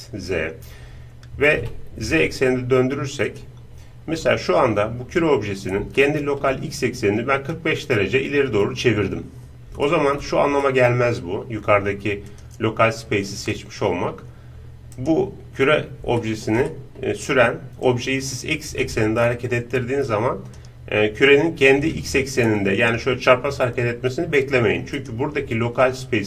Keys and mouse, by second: 0.5-2.4 middle drag, 1.7 r, 3.7-5.9 middle drag, 6.0-7.7 middle drag, 9.4-12.2 middle drag, 12.3-15.0 drag, 15.0-16.2 right drag, 16.2-18.8 middle drag, 17.9-23.0 drag, 19.2-21.1 middle drag, 25.1-26.2 right drag.